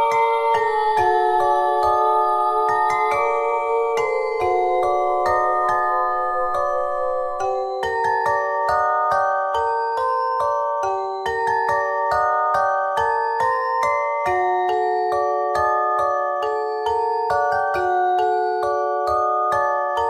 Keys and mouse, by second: 2.2 middle click, 2.9 KP_1, 3.8 z, 4.1 z, 6.2 z, 6.8 z, 9.8 e, 11.0 KP_1, 11.5 z, 14.7 middle click, 15.3 KP_1, 16.8 g, 17.6 click, 18.8 g, 19.3 click, 19.4 KP_1.